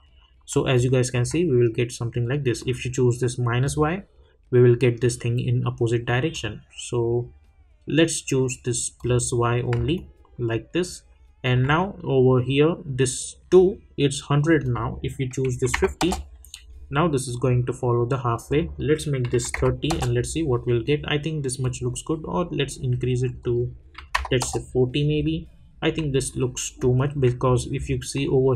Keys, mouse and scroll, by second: 1.0-1.4 alt+drag, 6.3 click, 8.9 click, 9.9-13.9 alt+drag, 14.6 click, 16.0 Return, 18.4 click, 19.9 Return, 21.6-23.2 drag, 24.4 Return, 26.2 alt+scroll up 1, 26.8 alt+click, 27.4 scroll up 1.